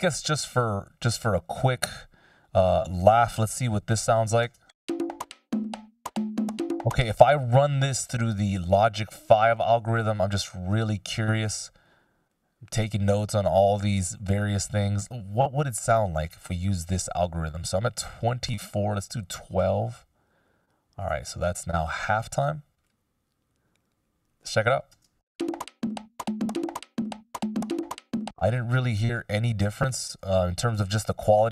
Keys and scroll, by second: 3.5 F16, 4.4 shift+space, 6.6 space, 25.0 shift+space, 27.8 space, 28.4 super+z.